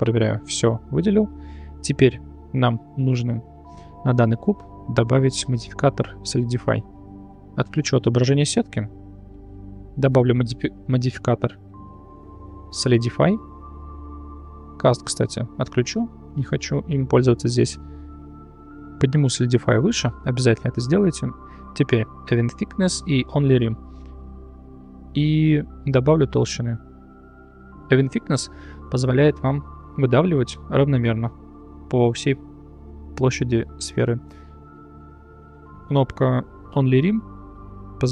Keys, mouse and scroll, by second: 0.9-1.5 middle drag, 1.6 middle click, 2.3 middle click, 3.2 Tab, 3.6 shift+middle click, 7.4-9.0 drag, 10.2-13.0 drag, 14.1 click, 18.3-19.3 drag, 19.9-20.5 middle drag, 21.4 click, 22.3 click, 23.4 click, 23.9 middle click, 26.5-27.8 shift+drag.